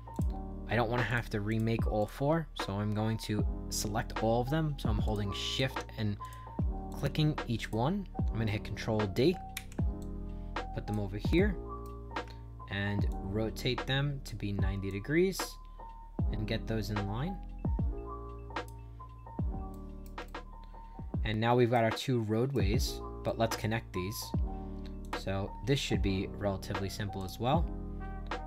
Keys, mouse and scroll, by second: 0.1 click, 1.0 shift+click, 1.4 shift+click, 1.9 shift+click, 5.0 click, 5.4 shift+click, 6.1 click, 6.8 shift+click, 7.5 click, 9.5 ctrl+d, 9.9 click, 11.3 right click, 13.0-14.2 shift+drag, 14.8-18.6 drag, 18.9 scroll down 4, 19.6 right click, 20.2-21.6 shift+right drag, 21.9 right click, 22.7 middle click, 22.7 scroll up 2, 23.2 right click, 24.9 click, 27.1 click.